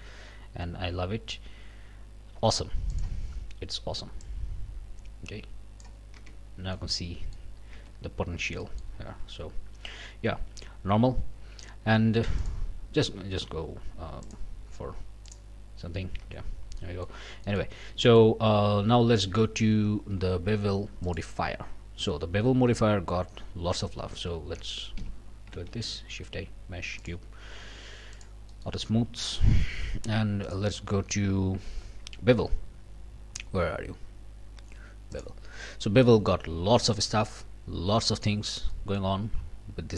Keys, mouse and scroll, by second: 2.9 click, 4.2-6.0 drag, 6.2 Tab, 6.4 scroll down 1, 6.6 scroll up 1, 6.7 click, 7.8 Tab, 8.2 scroll up 1, 8.6 click, 9.1 q, 12.4 click, 14.2 click, 15.2 click, 16.2 Tab, 16.5 scroll down 1, 16.8 click, 17.4 click, 17.7 scroll down 2, 18.1 shift+click, 19.4 shift+click, 21.0 click, 24.1 scroll down 2, 25.0 Delete, 25.7 shift+a, 27.0 click, 27.6 q, 28.1 click, 28.5 click, 28.9 scroll up 1, 29.2 shift+click, 30.5 click, 35.1 click, 38.3 scroll up 1, 38.7 click.